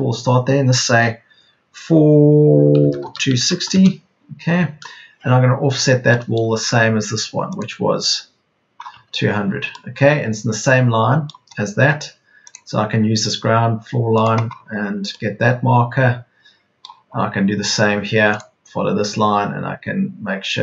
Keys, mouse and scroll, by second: 2.7 KP_4, 2.9 KP_2, 3.3 KP_6, 3.5 KP_0, 8.8 Escape.